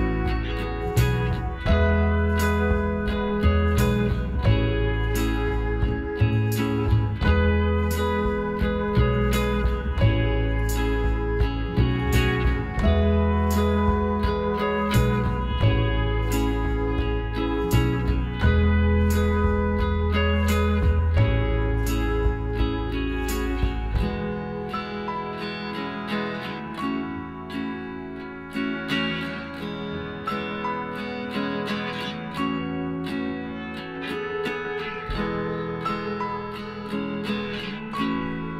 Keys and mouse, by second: 2.0-3.6 right drag, 2.4 b, 3.6 g, 6.8 b, 8.0 g, 10.6 b, 11.8-13.7 middle drag, 13.0 z, 14.4 z, 15.9 s, 19.5 ctrl+r, 22.2-23.8 drag, 23.8 g, 28.0 ctrl+r, 30.1-31.4 right drag, 31.0 b, 32.2 g, 36.6-37.6 drag, 37.3 z, 37.6-38.5 middle drag.